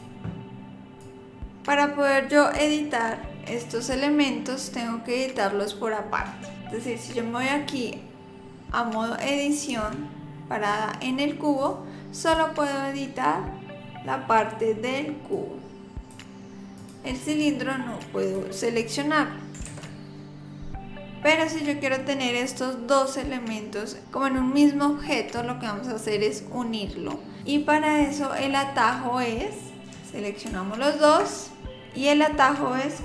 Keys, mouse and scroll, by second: 1.0 click, 3.3 click, 9.7 Tab, 11.6 click, 12.3 click, 16.8 click, 17.3 click, 18.0 click, 19.5 ctrl+z, 19.7 ctrl+z, 21.2 click, 27.4 click, 31.0 shift+click.